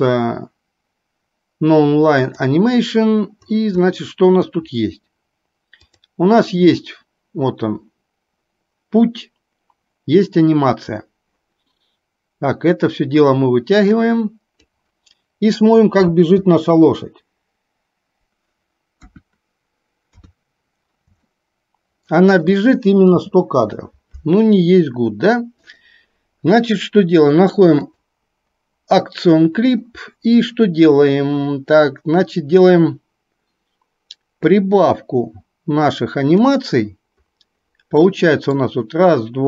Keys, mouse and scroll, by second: 2.3 click, 4.1-4.5 middle drag, 5.8 click, 12.7-15.0 drag, 16.1 space, 19.3 KP_1, 20.3 KP_3, 23.3 space, 25.7 click, 28.0 click, 34.6-36.6 drag.